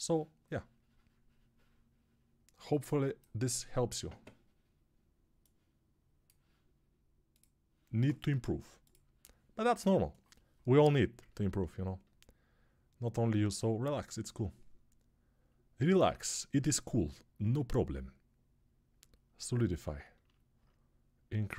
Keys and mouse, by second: 1.1-21.5 drag, 16.0 alt+q.